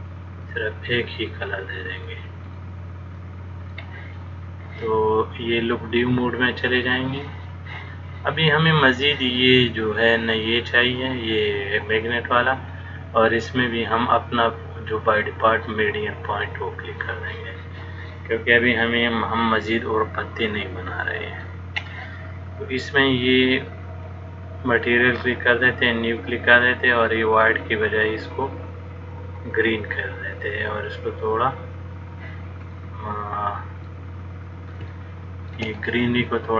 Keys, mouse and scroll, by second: 2.8 middle click, 6.8 click, 10.6 click, 12.8 click, 19.1 middle click, 24.3 click, 33.0 middle click, 35.1 shift+middle click, 36.1 middle click.